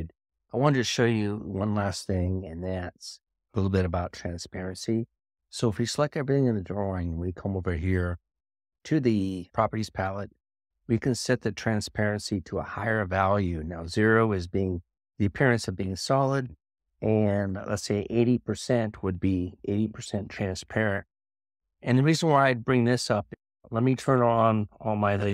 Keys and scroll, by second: 10.5 ctrl+1.